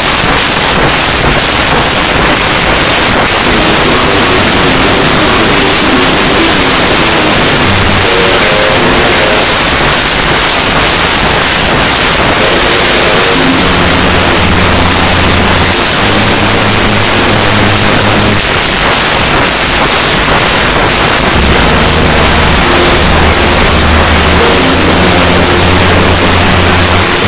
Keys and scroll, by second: 9.4 Page_Down, 18.4 Page_Down, 27.2 space.